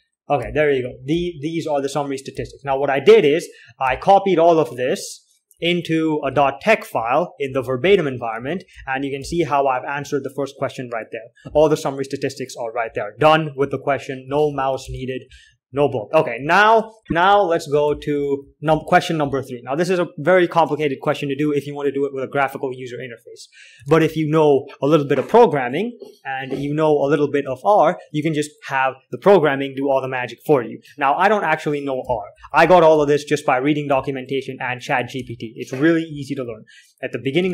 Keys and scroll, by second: 0.0-5.2 typing, 6.5 alt+3, 6.5 typing, 7.8 alt+4, 8.1-10.2 typing, 8.8 alt+k, 13.5 alt+2, 13.9 alt+3, 14.6-16.0 typing, 15.1 ctrl+h, 17.0 alt+Tab, 17.0 alt+4, 17.9-19.7 typing, 24.4 alt+Tab, 26.9 k, 27.2 j, 31.6-33.7 typing, 35.5 alt+Tab, 35.5-36.5 typing.